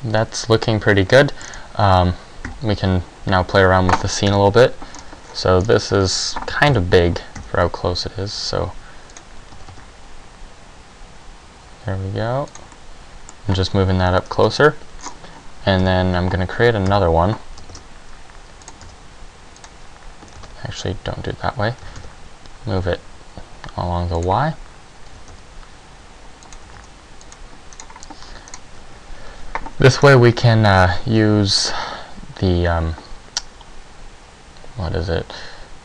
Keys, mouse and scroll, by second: 2.6 Escape, 2.6-3.3 scroll down 3, 4.4 KP_7, 5.1-5.7 scroll down 2, 5.4-5.7 scroll up 2, 5.7 scroll down 1, 6.8 KP_0, 7.5 s, 9.3 click, 9.8 g, 12.7 click, 12.9 middle click, 14.1 KP_Decimal, 14.5 KP_7, 15.2-15.7 scroll down 4, 15.7 scroll down 2, 16.0 KP_1, 17.0 KP_0, 18.2 shift+d, 18.8 click, 19.0 s, 19.8 click, 20.8 ctrl+z, 22.1 g, 24.5 click, 25.3 g, 26.7 click, 26.8 g, 27.4 click, 27.9 right click, 28.7 right click, 30.2 right click.